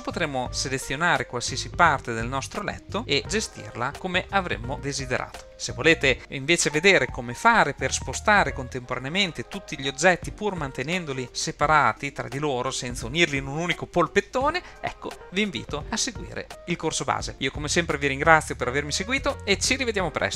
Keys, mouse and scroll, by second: 0.4 drag, 2.0 click, 2.7 click, 3.1 g.